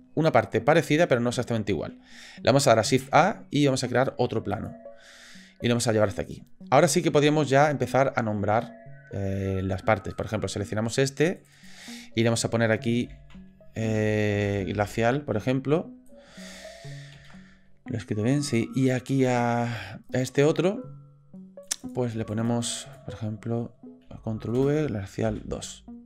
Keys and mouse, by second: 2.9 shift+a, 5.6 click, 10.1 click, 11.5-18.5 drag, 20.1 click, 21.6 click, 21.8-26.0 drag.